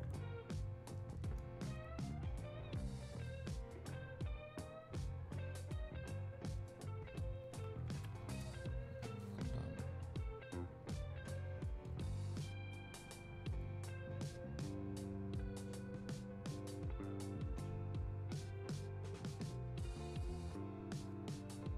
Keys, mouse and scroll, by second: 11.9 click.